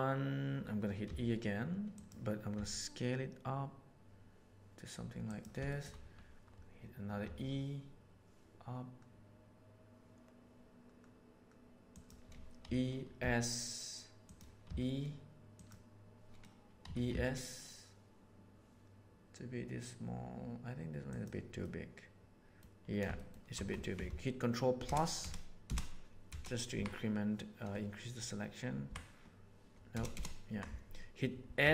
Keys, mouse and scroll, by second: 1.0 e, 2.5 s, 5.6 shift+middle click, 7.2 e, 12.6 e, 16.9 e, 21.6-22.6 middle drag, 23.1 shift+middle click, 24.8 ctrl+KP_Add, 25.2 ctrl+KP_Add, 25.6 ctrl+KP_Add, 26.2 ctrl+KP_Add, 26.7 ctrl+KP_Subtract, 28.9 ctrl+KP_Subtract, 29.9 ctrl+KP_Add, 31.5 s.